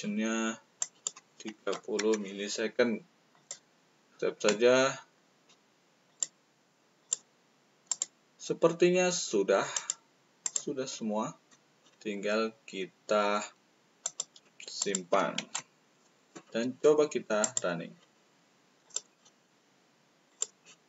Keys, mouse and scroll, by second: 0.7 click, 1.6 3, 3.2 click, 6.0 click, 6.9 click, 7.8 click, 9.7 click, 10.4 click, 10.8-11.8 middle drag, 14.0 click, 14.7 click, 15.3 ctrl+s, 17.4 click, 18.8 click, 20.2 click.